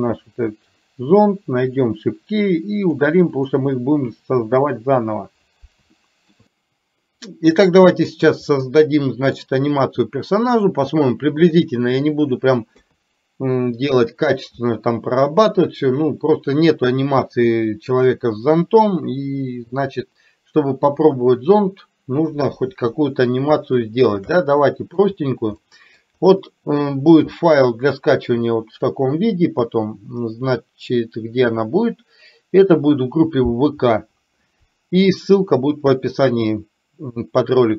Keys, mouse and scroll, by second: 2.9 click, 3.5 click, 6.1 shift+middle click, 7.4 middle click, 8.6 middle click, 12.7 KP_3, 23.9 shift+middle click, 24.4 middle click, 25.6 middle click.